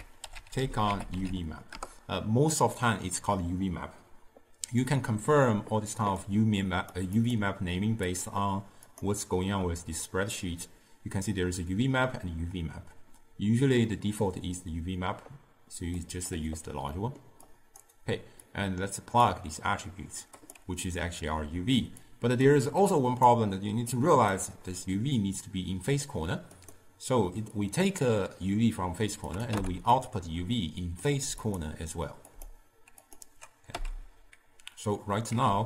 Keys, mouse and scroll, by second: 29.7 n, 33.3-33.8 drag, 33.8 n.